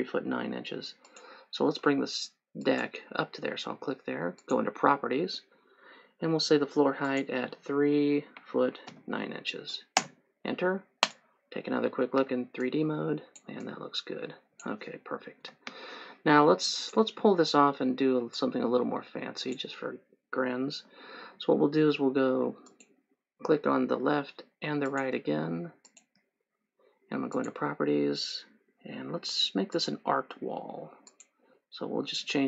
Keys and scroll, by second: 8.4 KP_3, 8.6 ', 9.0 KP_9, 10.2 Return, 12.3 3, 15.6 Escape.